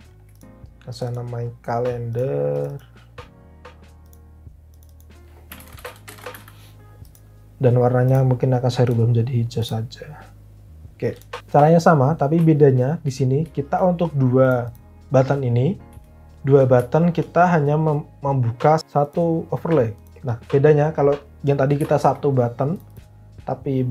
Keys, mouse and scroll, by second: 5.2-6.7 typing, 8.8 typing.